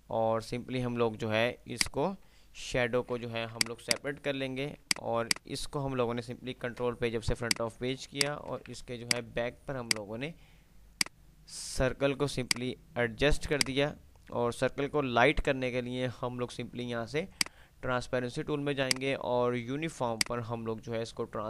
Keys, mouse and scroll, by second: 1.9 click, 3.0 alt+s, 3.4 click, 4.5 Delete, 4.5 click, 5.5 F3, 6.9 shift+Page_Up, 8.0 click, 9.2 F2, 9.2 click, 11.2-14.0 drag, 17.5-21.4 drag.